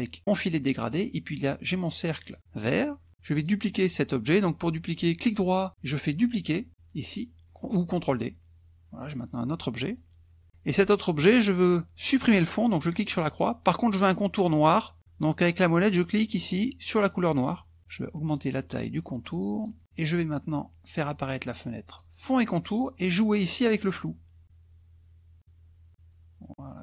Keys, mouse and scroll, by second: 1.7 click, 2.3 click, 3.3 click, 4.9 right click, 8.1 click, 9.9 click, 10.5 ctrl+z, 12.9 click, 17.2 click, 18.3 right click, 19.6 click, 21.9 click, 23.9-26.8 drag.